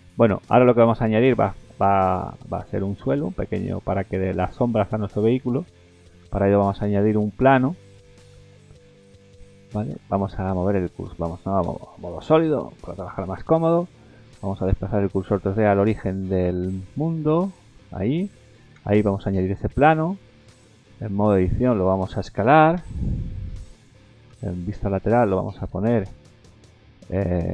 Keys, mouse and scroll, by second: 0.1 middle click, 0.4-0.7 scroll down 2, 0.7 middle click, 1.2 shift+middle click, 1.8 middle click, 3.0 shift+middle click, 3.4 scroll up 2, 3.7 middle click, 4.9 shift+middle click, 5.4 middle click, 6.2 shift+a, 8.8 middle click, 9.4 scroll up 3, 10.2 ctrl+z, 10.3 middle click, 10.7 middle click, 11.6 z, 12.7 middle click, 13.2 shift+middle click, 13.5-14.2 scroll up 2, 14.3 scroll up 1, 14.7 shift+s, 18.7 shift+a, 20.2-20.6 scroll down 3, 20.6 middle click, 21.2 Tab, 21.5 middle click, 22.0 scroll down 1, 22.8 scroll down 1, 22.8 s, 24.3 KP_3, 24.8-25.1 scroll up 4, 25.1 middle click, 26.1 KP_3, 26.6 scroll up 3.